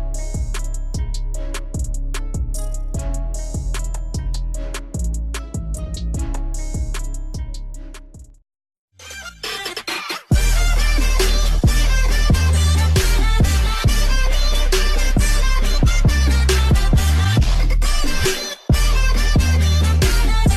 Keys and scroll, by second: 1.0 Tab, 3.6 ctrl+-, 5.1 ctrl+s, 5.8 ctrl++, 8.5 Print.